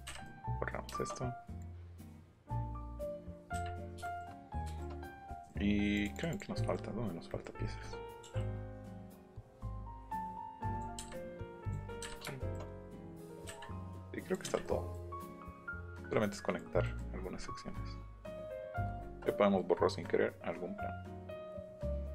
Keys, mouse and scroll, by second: 0.7 middle click, 1.6-2.8 drag, 3.8 shift+middle click, 4.7 shift+middle click, 4.9 middle click, 5.6 middle click, 5.9 click, 6.1 click, 6.3 click, 9.4 click, 10.0 click, 11.4 click, 12.2 shift+middle click, 12.8 click, 13.4 Delete, 13.9 click, 15.4 click, 18.6 middle click, 19.0 shift+middle click, 19.6 middle click.